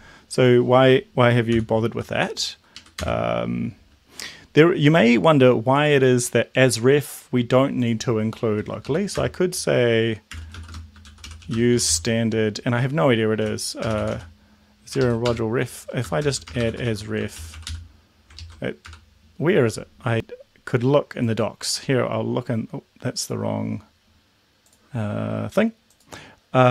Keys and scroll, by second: 1.4 ctrl+k, 1.8 ctrl+;, 2.8 Up, 3.0 Return, 8.8 Left, 9.1 Return, 10.1-12.1 typing, 13.2-18.8 typing, 15.0 ctrl+shift+Left, 18.3 ctrl+shift+Left.